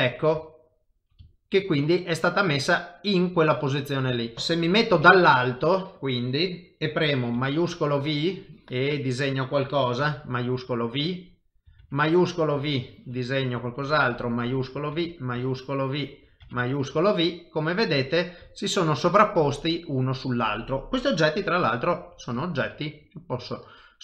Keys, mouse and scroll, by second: 0.6 shift+middle click, 1.3 ctrl+middle click, 1.7 middle click, 4.2 shift+middle click, 4.3 a, 4.3 x, 4.7 KP_7, 5.4 shift+middle click, 7.4 shift+v, 7.9 click, 11.2 shift+v, 12.6 click, 14.4 shift+v, 15.4 click, 16.7 shift+v, 17.2 middle click, 18.6 shift+middle click, 19.0 middle click, 21.4 g, 22.4 click, 22.6 g, 23.5 middle click.